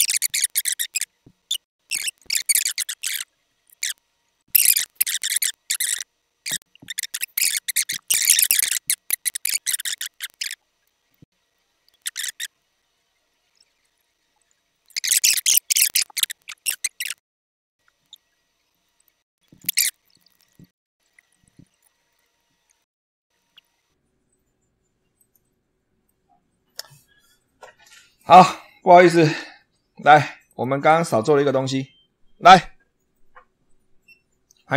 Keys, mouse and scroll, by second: 0.0 click, 0.2 Delete, 0.2 scroll up 1, 0.4 middle click, 0.6 ctrl+click, 0.8 click, 1.5 click, 1.7 middle click, 1.9 Delete, 1.9 click, 2.1 click, 2.2 middle click, 2.5 click, 2.6 middle click, 2.8 click, 3.2 click, 3.5 click, 3.7 click, 3.8 click, 4.0 click, 4.4 Delete, 4.6 middle click, 4.8 middle click, 5.1 middle click, 5.6 ctrl+click, 5.6 ctrl+middle click, 6.1 click, 6.4 click, 6.5 middle click, 6.8 click, 7.1 click, 7.5-7.8 scroll down 2, 7.8 Return, 8.8 alt+F7, 8.8 click, 9.0 middle click, 9.3 shift+middle click, 9.7 middle click, 9.8 ctrl+click, 10.0 click, 10.2 click, 10.6 click, 10.8 click, 10.9 click, 11.0 middle click, 11.4 click, 11.9 click, 11.9 middle click, 12.1 middle click, 12.4 click, 12.6 click, 12.8 click, 12.9 click, 13.4 click, 13.4 middle click, 14.3 click, 14.6 click, 14.8 click, 15.1 click, 15.4 super+2, 15.4 click, 15.6 click, 15.7 click, 16.0 click, 16.2 shift+middle click, 16.5-17.2 drag, 17.6 click, 17.7 Delete, 17.8 click, 18.0 click, 18.0 middle click, 18.1 scroll down 2, 18.2 click, 18.4 ctrl+scroll up 2, 18.6 ctrl+click, 18.7 click, 18.9 click, 19.0 click, 19.9 super+2, 21.9 super+2, 22.0 click, 22.4 Delete, 22.4 click, 22.9 click, 23.0 middle click, 23.2 click, 23.2 middle click, 23.5 ctrl+click, 23.8 click, 25.1 click, 26.0 middle click, 28.1 click, 29.3 ctrl+z, 30.4 ctrl+click, 31.1 Delete.